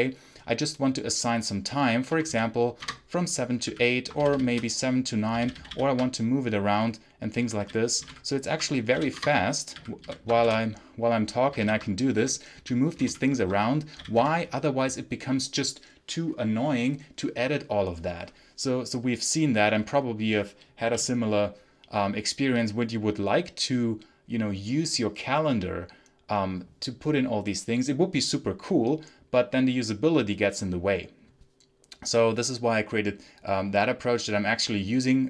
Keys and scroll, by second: 1.7-4.1 typing, 2.7 Return, 5.3 ctrl+j, 5.6 ctrl+k, 7.1-9.9 typing, 11.5 ctrl+-, 11.6 ctrl+i, 11.8-13.9 typing, 14.1 Return.